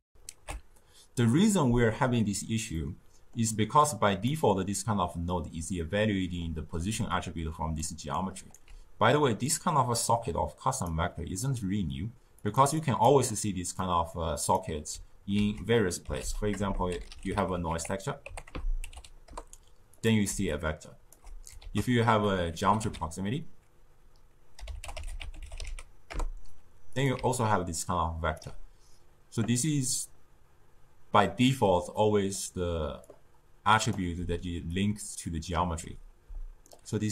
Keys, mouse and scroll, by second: 0.0 ctrl+alt+shift+q, 2.6-3.7 middle drag, 3.7 click, 5.7-6.8 middle drag, 6.8 d, 7.0 click, 7.7-8.0 d, 8.1 right click, 8.5 d, 9.4-11.3 drag, 11.3-12.3 middle drag, 12.3 click, 12.7-15.2 drag, 15.2 ctrl+a, 16.5 BackSpace, 20.2 d, 20.4 click, 21.0 d, 21.1 d, 21.5 ctrl+a, 27.1 d, 27.5 click, 28.3 d, 28.4 d, 31.9-33.0 middle drag, 33.0-34.1 drag, 34.1 d, 34.6 d, 34.6-35.4 drag, 35.4-35.7 d, 36.2 d, 36.6-37.1 right drag.